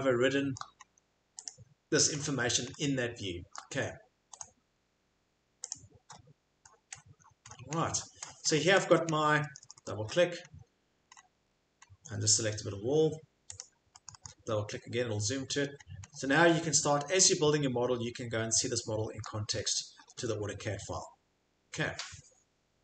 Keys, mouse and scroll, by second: 0.6 shift+middle click, 0.8 middle click, 0.9 middle click, 1.5 click, 2.1 middle click, 2.2 middle click, 3.6 shift+middle click, 4.4 right click, 5.7 click, 6.1 scroll, 6.7-10.5 scroll, 8.4 shift+middle click, 8.8 Escape, 10.5 middle click, 10.8-11.8 scroll, 13.6 click, 13.9 right click, 14.1 scroll, 15.3-16.5 scroll, 19.2-19.5 shift+scroll, 19.5 shift+middle click, 20.0 Escape, 20.1-21.3 scroll, 20.2 Escape, 21.1 shift+middle click, 21.3 shift+middle click, 22.0 shift+click, 22.1 shift+middle click, 22.2 shift+click, 22.3 shift+middle click, 22.4 shift+click.